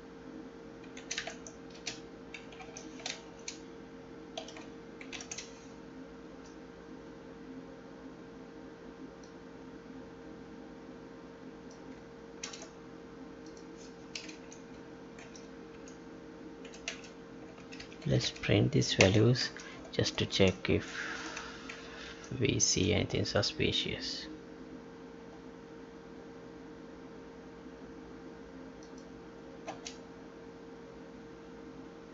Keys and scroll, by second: 2.6 ctrl+z, 6.2 Left, 12.4 ctrl+c, 14.3 Left, 15.2 ctrl+v, 15.7 Right, 19.4 ctrl+s, 20.4 alt+Tab, 21.3 Tab, 22.1 ctrl+p, 29.6 space.